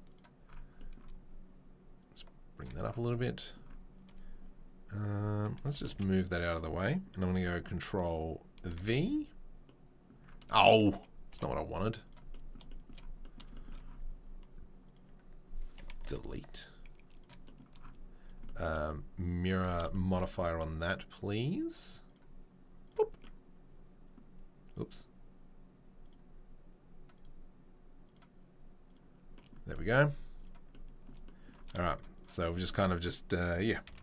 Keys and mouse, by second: 2.0-6.5 right drag, 5.7 g, 6.5-22.0 middle drag, 8.8 ctrl+v, 11.3 g, 16.1 Delete, 16.5 right click, 22.0 click, 22.1-24.7 middle drag, 24.7 click, 24.7-26.0 middle drag, 26.0-28.1 drag, 28.1-32.1 middle drag, 32.1-34.0 shift+drag, 33.8 c.